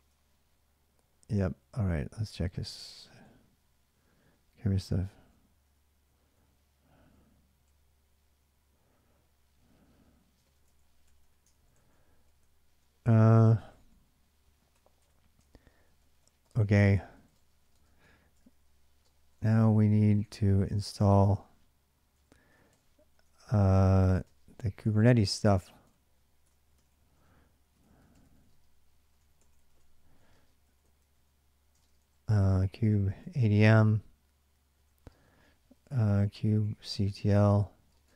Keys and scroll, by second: 0.0-7.5 typing, 10.0-11.0 typing, 11.3 ctrl+[, 11.3 ctrl+j, 12.2-21.2 typing, 22.3-33.2 typing, 34.7-38.1 typing.